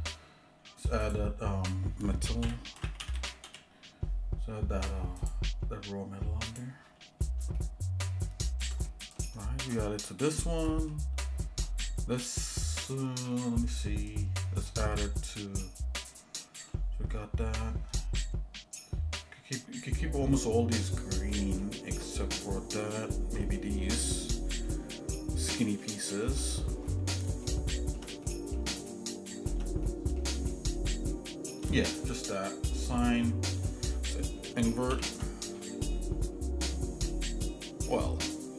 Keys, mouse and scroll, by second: 1.0-5.6 drag, 6.8 click, 7.6-8.6 shift+middle drag, 8.9 middle click, 9.4 shift+middle click, 9.8 middle click, 10.3 scroll down 1, 10.7 middle click, 11.7 scroll up 1, 12.2 middle click, 13.3 middle click, 14.7 middle click, 15.3 middle click, 16.4 middle click, 21.3 middle click, 22.1 middle click, 24.6 l, 25.6 click, 25.9 click, 26.3 click, 26.9 middle click, 27.4 shift+middle click, 28.0 l, 28.2 middle click, 28.9 shift+middle click, 29.8 middle click, 30.5 shift+middle click, 31.1 shift+middle click, 32.8 click, 33.5 middle click, 34.9 ctrl+i, 37.4-37.7 scroll down 2, 38.0 shift+middle click.